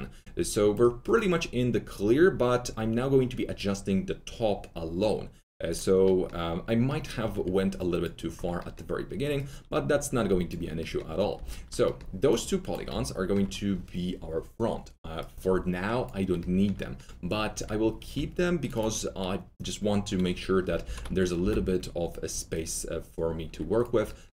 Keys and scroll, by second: 7.2 1, 11.3 4, 18.1 2, 20.8 shift+x, 21.4 shift+r.